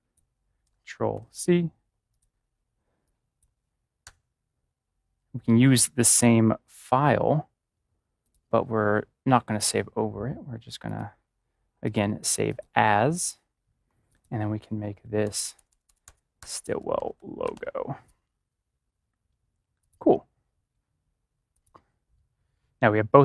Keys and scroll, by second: 1.1 ctrl+c, 4.0 ctrl+c, 5.1 BackSpace, 14.9-17.5 typing.